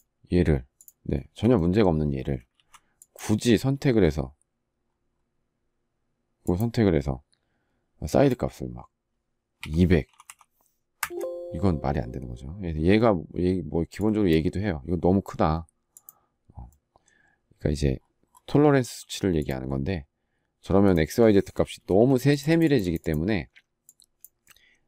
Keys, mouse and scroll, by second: 0.9 space, 2.3 ctrl+z, 10.7 Return, 21.6 space.